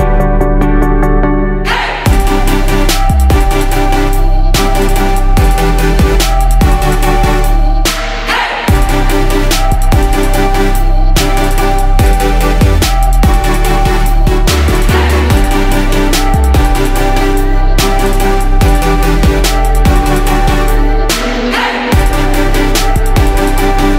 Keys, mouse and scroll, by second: 12.2 ctrl+g, 12.9 ctrl+click, 16.1 Down, 16.3 Down, 18.3 click, 19.2 ctrl+shift+g, 20.1-23.9 drag.